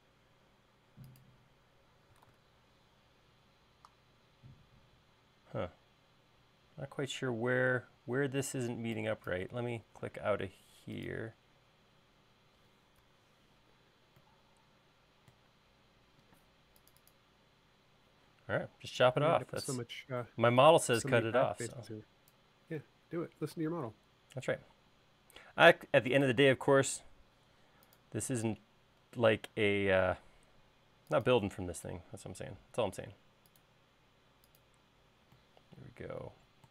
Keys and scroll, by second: 1.7 e, 2.3 super+z, 6.5 e, 10.3 space, 13.1 Escape, 15.9 e, 16.5 space, 18.1 l, 21.1 e, 24.9 l, 32.5 l.